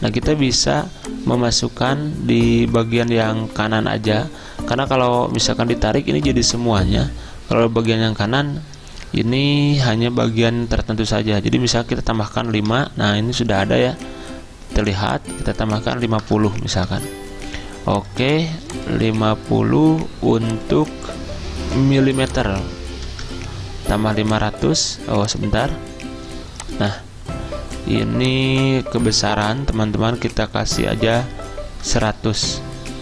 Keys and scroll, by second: 11.2 5, 12.6 Return, 16.1-16.9 typing, 23.1 0, 30.6-32.6 typing.